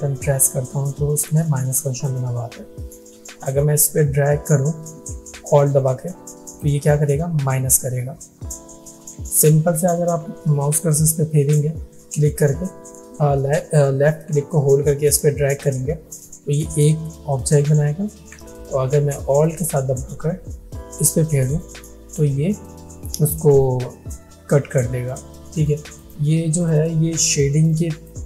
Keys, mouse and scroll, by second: 5.8-6.7 alt+drag, 8.8 ctrl+z, 10.9-11.8 drag, 17.8 ctrl+Num_Lock, 17.8 click, 18.1 ctrl+z, 20.8-21.8 alt+drag, 25.6 click, 25.6 click, 27.8-28.2 drag.